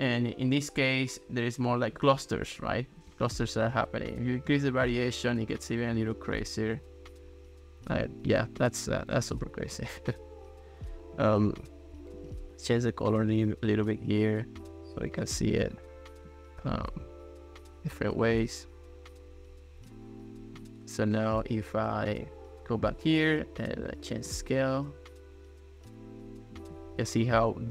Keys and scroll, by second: 2.2 ctrl+s, 3.1 ctrl+x.